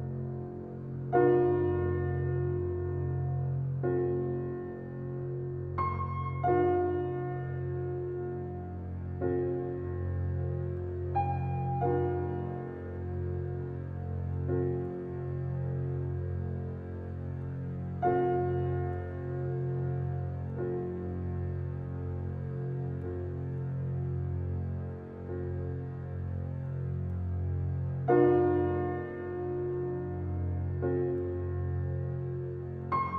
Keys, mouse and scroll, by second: 1.4 click, 1.7 shift+click, 2.1 shift+click, 2.5 g, 6.4-7.4 scroll down 6, 6.8 click, 7.4-8.2 middle drag, 8.2 click, 9.1 click, 9.8-10.4 scroll up 7, 10.4 g, 11.7-12.5 scroll down 6, 12.0 click, 12.5-13.1 middle drag, 13.1-13.6 scroll up 3, 13.6 shift+a, 15.0 g, 16.0 s, 16.8 alt+middle click, 17.1 scroll up 1, 17.3 g, 19.2-19.7 middle drag, 19.7 scroll up 2, 19.9 alt+middle drag, 20.6 g, 22.3 alt+middle click, 22.6 scroll up 8, 22.8 shift+middle click, 23.3 s, 24.9 s, 26.2 g, 27.4-29.0 middle drag, 29.0 Tab, 29.8 ctrl+b, 32.5 scroll down 1, 32.8 Tab.